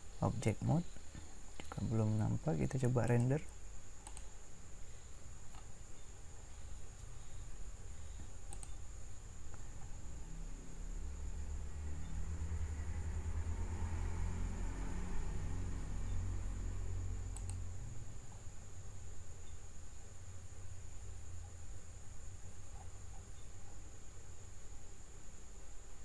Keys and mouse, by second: 8.5-14.0 drag, 17.4-19.3 drag.